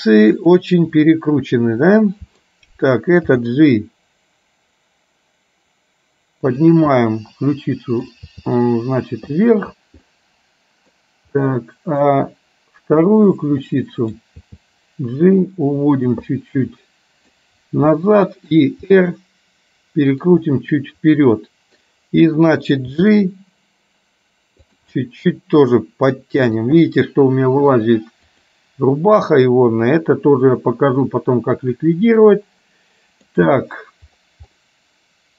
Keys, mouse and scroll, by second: 0.5 click, 1.0-2.6 middle drag, 3.4 g, 7.0-8.5 middle drag, 8.5 g, 10.1 middle click, 11.4 middle click, 13.1 click, 13.8 middle click, 14.5 g, 16.6 middle click, 18.0 middle click, 19.0 r, 20.5-21.9 middle drag, 22.9 g, 25.1-26.0 scroll up 1, 26.0 middle click, 26.3-26.8 scroll up 1, 28.4 click, 29.4-33.4 middle drag, 34.6 middle click.